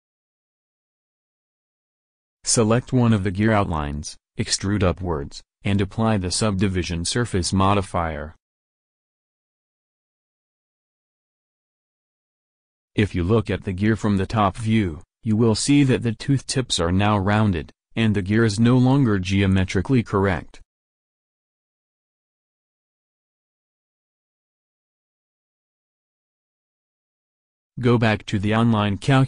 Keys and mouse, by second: 1.8-2.9 middle drag, 4.6 middle click, 4.8 Tab, 7.3 e, 9.9 Tab, 10.7 Tab, 11.6-13.3 drag, 13.7 click, 15.0 KP_7, 23.3 ctrl+v, 26.6 a, 27.5 alt+Tab, 28.2 alt+Tab, 28.4 alt+Tab, 28.7 alt+Tab, 28.9 alt+Tab.